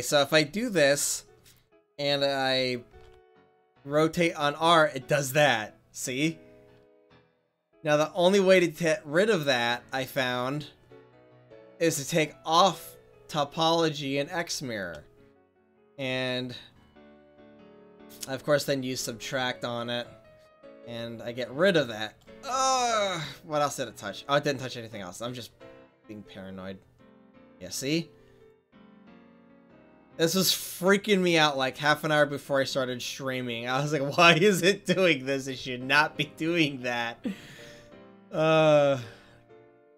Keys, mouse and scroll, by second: 2.9 r, 10.2-14.2 middle drag, 14.2 click, 14.7-15.8 middle drag, 20.2-22.4 drag, 22.9 ctrl+z, 26.1 click, 27.8-29.8 middle drag, 29.8 f, 33.0-34.3 middle drag.